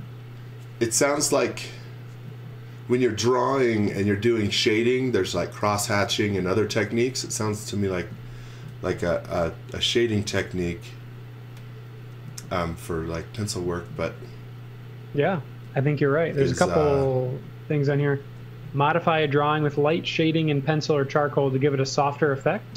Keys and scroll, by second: 8.6 x, 9.0 v, 14.0 z, 15.4 space, 16.3 b, 18.2 space, 19.1 s.